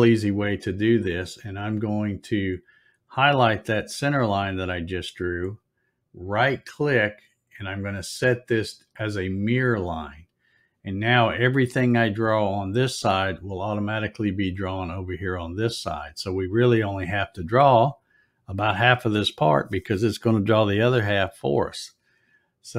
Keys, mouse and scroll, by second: 1.2 middle click, 4.5 click, 5.6 right click, 9.5 click.